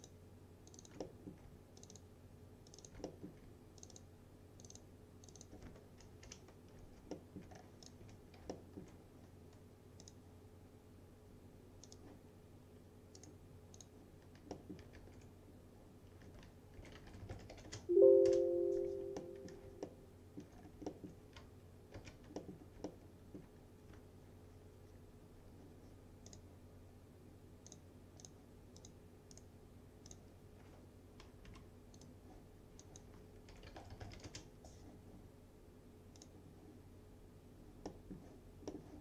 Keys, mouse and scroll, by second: 1.1 alt+middle click, 1.9 ctrl+click, 3.1 alt+middle click, 3.8 ctrl+click, 6.3 ctrl+BackSpace, 7.2 alt+middle click, 7.6-7.9 scroll down 1, 7.9 click, 8.1 F4, 8.6 alt+middle click, 10.1 click, 13.2 right click, 13.8 click, 14.6 middle click, 15.0 ctrl+s, 16.6-18.1 typing, 19.2-19.6 scroll, 19.6 scroll up 1, 19.9-20.5 alt+middle click, 20.7 scroll down 2, 20.9 alt+middle click, 22.0 ctrl+s, 22.4 middle click, 23.2-23.5 alt+middle click, 26.3 click, 29.4 right click, 30.1 click, 31.5 Left, 32.0 click, 33.3-34.7 typing, 36.2 click, 37.9 middle click.